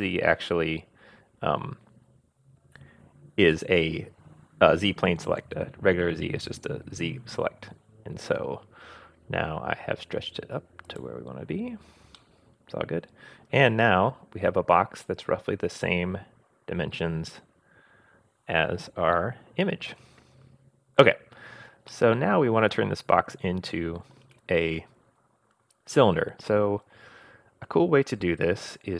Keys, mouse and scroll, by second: 12.2-20.0 middle drag, 21.9-24.3 middle drag.